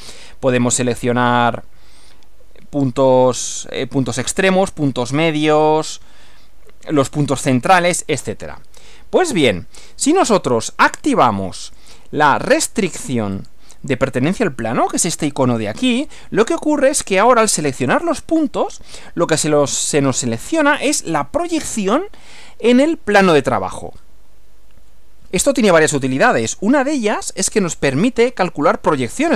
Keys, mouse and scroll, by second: 11.7 click, 13.4 click.